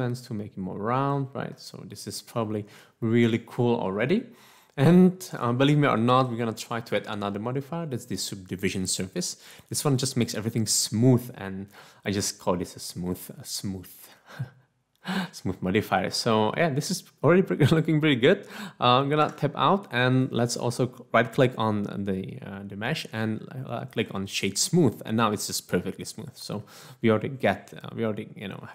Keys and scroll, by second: 19.3 Tab.